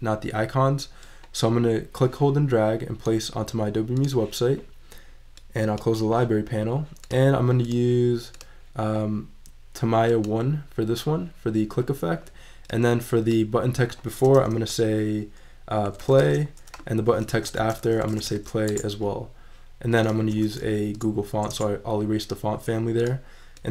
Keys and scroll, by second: 15.6-16.7 typing, 17.4 super+a, 17.8-18.7 typing, 20.3 super+a, 20.9 super+BackSpace, 21.5 Return.